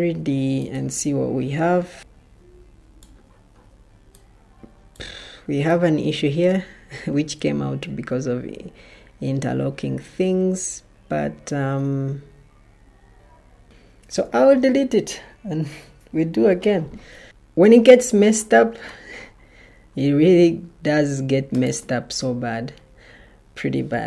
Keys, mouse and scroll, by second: 2.0 middle click, 6.6 middle click, 14.0 alt+Delete.